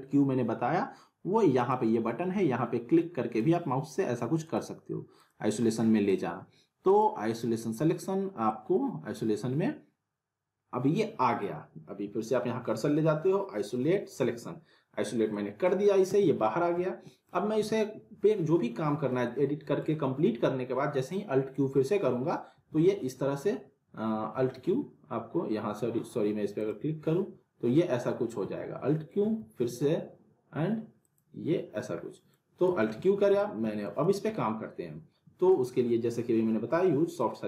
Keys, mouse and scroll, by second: 1.6 click, 8.5 middle click, 15.3-15.9 middle click, 16.1 z, 16.5 scroll down 1, 16.8-17.4 alt+middle click, 17.6 z, 18.9 scroll down 1, 19.2-19.8 alt+middle click, 19.8-20.2 scroll up 1, 22.7 alt+q, 26.6 click, 28.6 alt+q, 31.0 click, 32.1 middle click, 32.8 alt+q, 33.4-34.0 alt+middle click, 34.0 z, 34.3-35.5 alt+middle drag, 37.1 click.